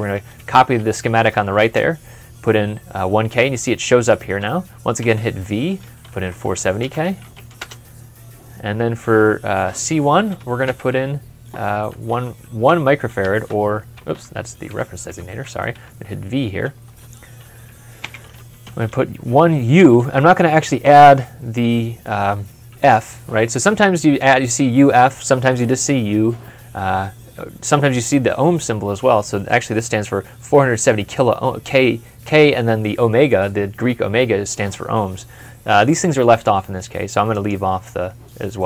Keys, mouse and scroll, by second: 0.9 typing, 1.6 Return, 4.8-7.7 typing, 10.5 Return, 10.8 e, 12.5-13.1 typing, 14.0 Escape, 15.8 typing, 17.8 typing, 19.3 typing.